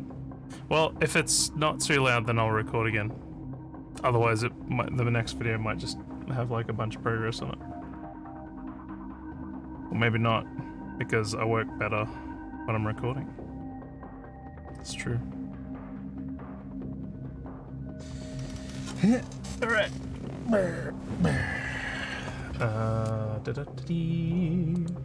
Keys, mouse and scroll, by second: 24.7 click.